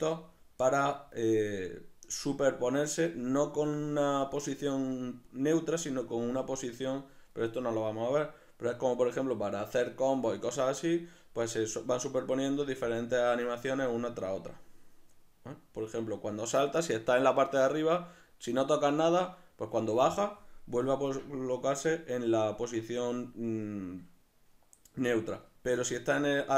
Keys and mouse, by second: 21.8-23.7 middle drag.